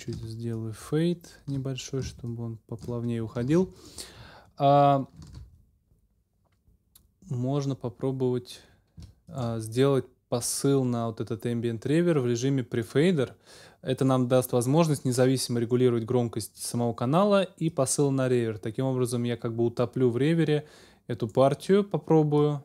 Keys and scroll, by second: 3.5 ctrl+shift+super+s, 5.3 super+s.